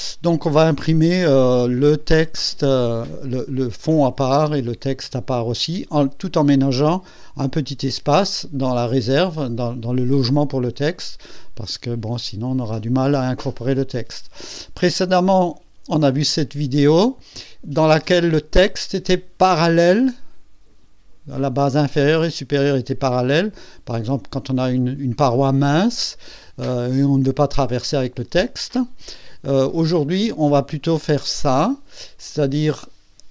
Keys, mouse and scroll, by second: 2.0 click, 2.3 space, 4.4 space, 6.2-6.5 scroll up 2, 8.3 scroll down 2, 13.9 scroll down 2, 16.2 click, 18.5 click, 18.9 click, 19.2 space, 19.7-20.9 drag, 28.3 space, 30.1 click, 31.6-31.9 scroll down 1, 32.3-32.9 drag.